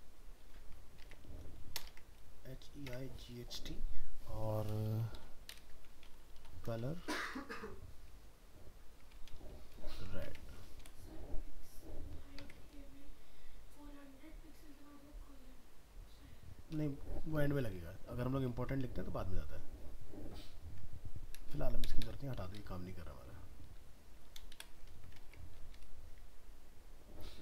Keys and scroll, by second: 1.0 alt+Tab, 10.0 ctrl+s, 10.2 alt+Tab, 21.3 ctrl+BackSpace, 24.9 ctrl+s, 25.2 alt+Tab.